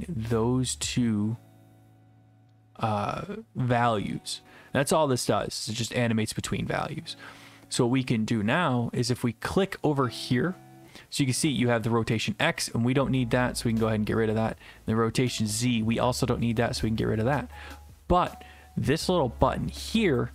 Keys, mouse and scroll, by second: 5.7 click, 6.5 click, 12.2 click, 13.8 click, 16.6 click.